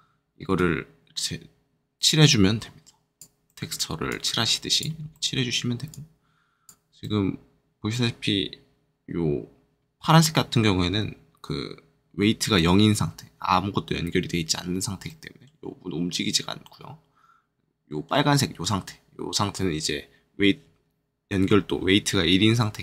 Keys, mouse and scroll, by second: 0.5 click, 3.4 middle click, 4.0 click, 5.1 middle click, 5.8 click, 7.0 middle click, 15.0 middle click, 16.6 middle click.